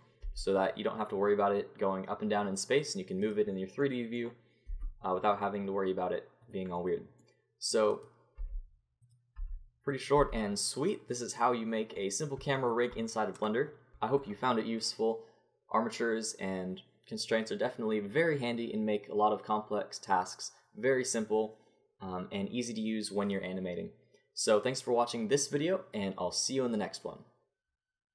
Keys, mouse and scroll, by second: 0.2 g, 3.9 click, 4.7 g, 7.9-11.4 drag, 8.4 g, 9.4 g, 10.1 g, 13.9 n.